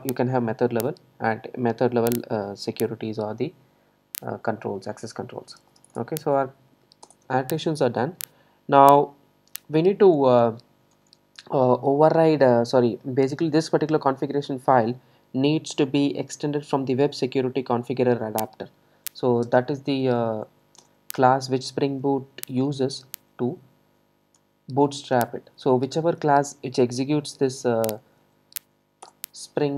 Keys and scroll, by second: 20.9 Return, 29.1 Return.